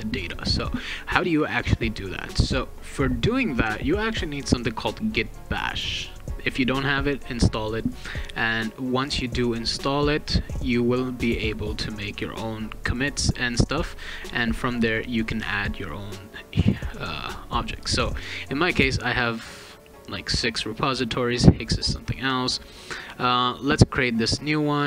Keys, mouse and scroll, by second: 0.4 click, 1.5 click, 3.3 click, 5.2 click, 8.0 click, 9.4 click, 11.5 click, 13.5 click, 15.2 click, 17.7 click, 23.4 click.